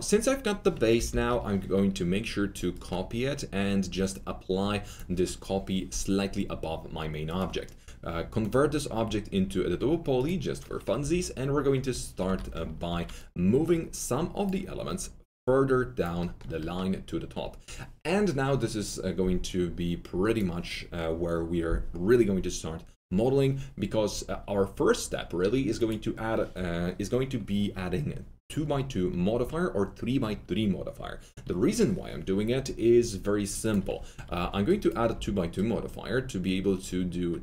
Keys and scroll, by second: 2.6 F3, 10.9 F3, 12.2 F3, 12.6-13.3 typing, 34.9-35.6 typing.